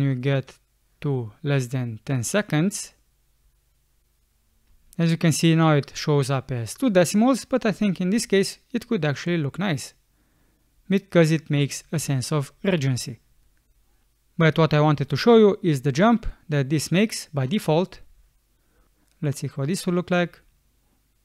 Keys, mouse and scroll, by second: 4.7 space, 8.2 space, 15.8 space, 17.9 space.